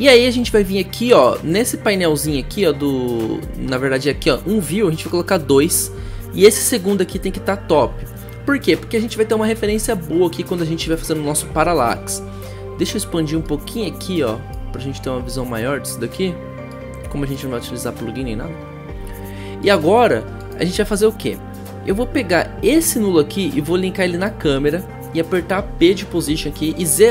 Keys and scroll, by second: 25.8 p.